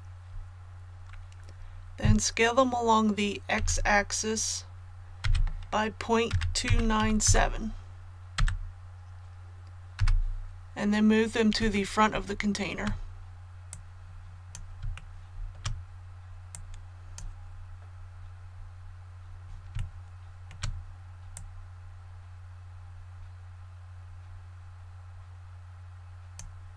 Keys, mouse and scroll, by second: 3.5 s, 5.2 x, 6.3 KP_Decimal, 6.6 KP_2, 7.0 KP_9, 7.2 KP_7, 11.7 shift+middle click, 13.7 click, 14.9 shift+middle click, 16.5-17.5 drag, 17.5 scroll up 1, 19.8 shift+middle click, 21.3-26.5 drag.